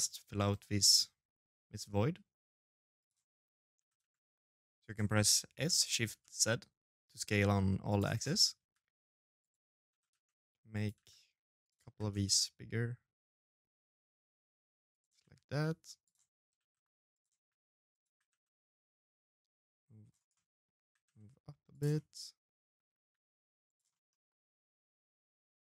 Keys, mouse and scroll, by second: 0.3 middle click, 1.7 click, 2.5 s, 4.4 s, 7.3 g, 8.6 s, 9.7 g, 10.6 g, 14.0 shift+d, 15.3 s, 16.1 g, 16.8 g, 19.1 middle click, 19.6 middle click, 19.6 g, 20.7 middle click, 21.7 g, 22.7 middle click, 24.5 shift+d.